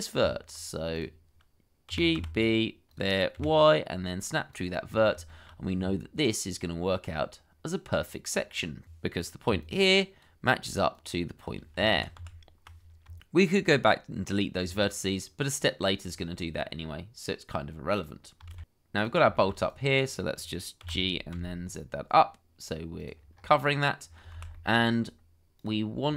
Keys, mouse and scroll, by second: 1.9 g, 2.1 b, 3.3 y, 4.8 scroll down 1, 5.3 shift+middle click, 5.7-6.9 scroll down 1, 7.0-8.3 scroll up 1, 9.4 d, 11.9 ctrl+z, 13.0 Tab, 14.5-15.2 scroll down 1, 15.2 middle click, 16.1-16.4 scroll down 1, 16.4 middle click, 18.0 scroll up 1, 18.5 shift+z, 18.7 middle click, 19.0 scroll down 1, 19.5 middle click, 20.4 shift+middle click, 20.8 g, 21.3 z, 23.3-23.7 scroll up 1, 23.7 middle click, 24.3 shift+z, 24.5 shift+middle click, 26.0 scroll up 1.